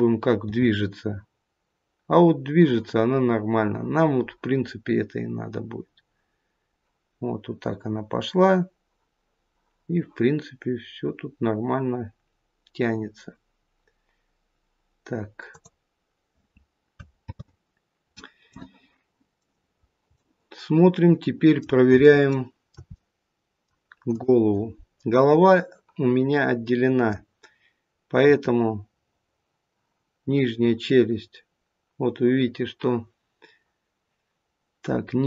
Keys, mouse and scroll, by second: 0.4 g, 17.2 ctrl+z, 18.5 middle click, 19.6-20.5 scroll down 3, 20.1 middle click, 22.0 shift+middle click, 22.7 middle click, 24.0 click, 26.2 middle click, 28.2 r.